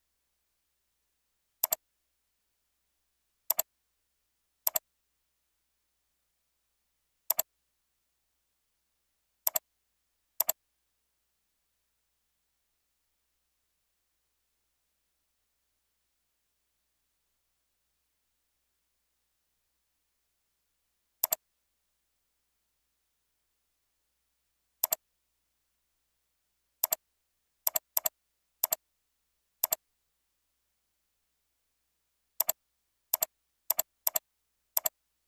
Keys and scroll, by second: 22.3 ctrl+Right, 23.0 ctrl+Down, 25.0 ctrl+Down, 31.8 ctrl+z.